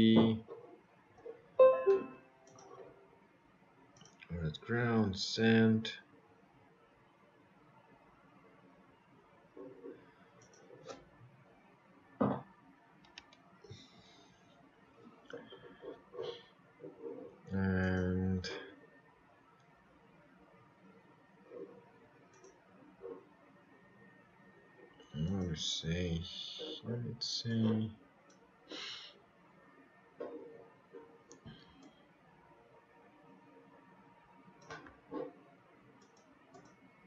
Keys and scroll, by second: 30.6 ctrl+z.